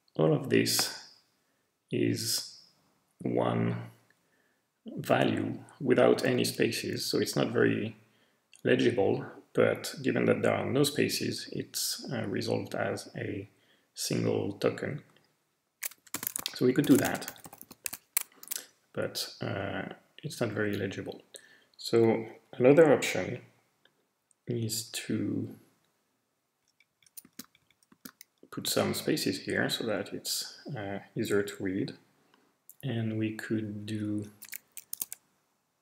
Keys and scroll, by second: 16.1-18.4 typing, 16.9 alt+shift+l, 19.9 typing, 24.9 Left, 25.4-25.8 Left, 26.9 Right, 27.2 space, 27.4 Right, 27.6 Right, 27.9 space, 29.3 Left, 29.8 Left, 33.5 Left, 33.7 Left, 33.9 Left, 34.1 Left, 34.9 ', 35.1 Right, 35.6 Right, 35.7 Right, 35.7 Right.